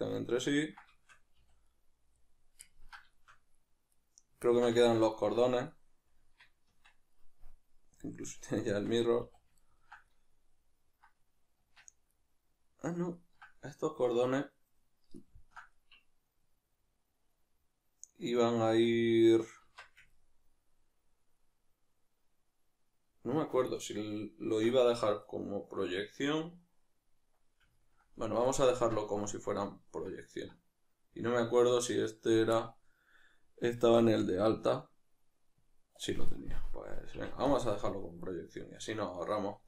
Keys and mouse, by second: 1.4 a, 3.9 right click, 4.5-5.7 ctrl+middle drag, 5.7-6.2 right drag, 6.2 Tab, 7.9-9.6 drag, 8.7 Tab, 9.6-38.3 ctrl+middle drag, 11.6 Tab, 19.6 Tab, 28.7 Tab, 37.1 x, 38.3 right click, 38.6-39.6 middle drag.